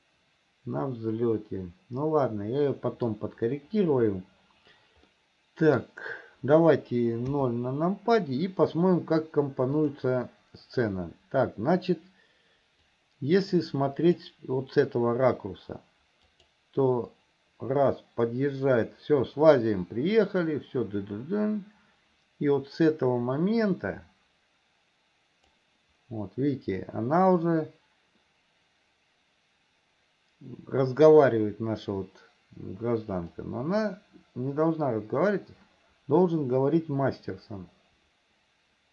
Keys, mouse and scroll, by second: 5.4 middle click, 6.1 scroll down 1, 7.5 KP_0, 10.0 click, 13.0-14.5 drag, 16.6 click, 17.6-26.1 drag, 33.7-38.9 drag.